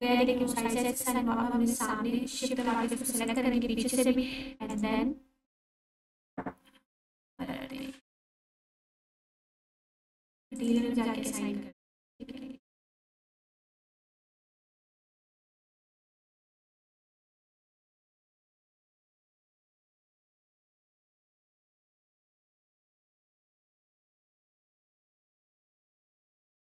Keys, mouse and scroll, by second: 0.7 ctrl+1, 3.3-4.8 drag, 15.5 click, 16.0 1, 17.5 click, 18.2 Tab, 18.8-20.6 scroll down 1, 21.6 shift+a, 22.7 click, 24.1 1, 24.7 click.